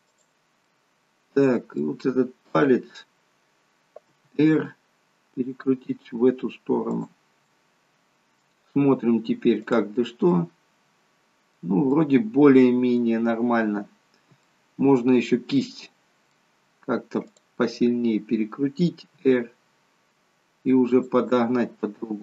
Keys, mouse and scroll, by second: 0.8 middle click, 2.6 click, 4.3 r, 7.6 middle click, 9.7 click, 10.4 middle click, 11.9 middle click, 14.5 middle click, 17.4 click, 19.3 r.